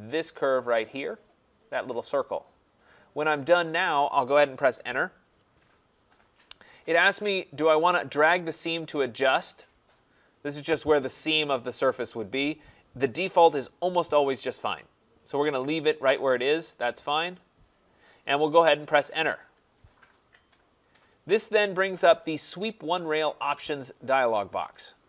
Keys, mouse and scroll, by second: 0.1-5.2 drag, 5.2 Return, 19.4 Return, 21.9 click.